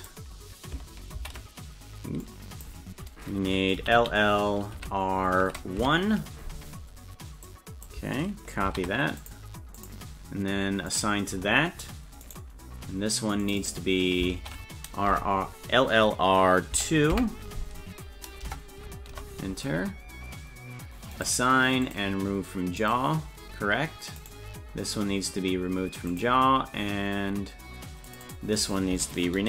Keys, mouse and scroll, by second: 0.0-9.3 drag, 4.0 shift+l, 9.8 click, 10.9 click, 12.2 right click, 13.4 click, 13.6-19.5 drag, 21.1 click, 21.9 click, 22.8 click, 24.2 right click, 26.1 click, 28.1 click, 28.2-29.4 drag.